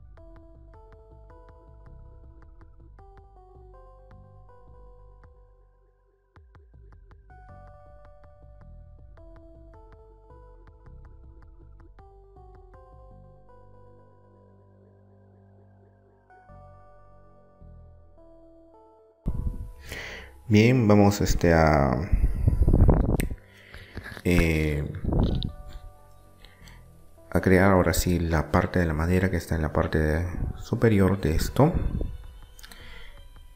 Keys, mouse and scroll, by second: 0.0-2.4 right drag, 2.4 middle click, 3.0 z, 3.4 b, 4.1 z, 4.2 middle click, 4.6 click, 5.5 r, 6.1-7.1 drag, 7.3 middle click, 8.3-9.3 right drag, 9.3 middle click, 9.3 e, 10.0 r, 10.7 click, 11.8 e, 12.2 click, 12.9 r, 13.4 click, 13.8 r, 14.5 click, 15.1 e, 15.3 click, 17.1 e, 17.4 click, 18.0 middle click, 30.2 Tab, 30.7-32.3 middle drag, 32.3-33.5 drag.